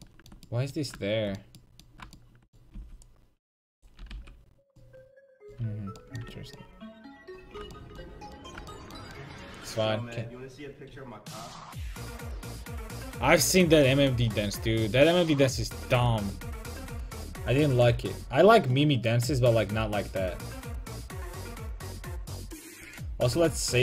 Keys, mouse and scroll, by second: 2.8 c, 4.0 x, 5.6 a, 6.3 Tab, 17.8-23.8 drag.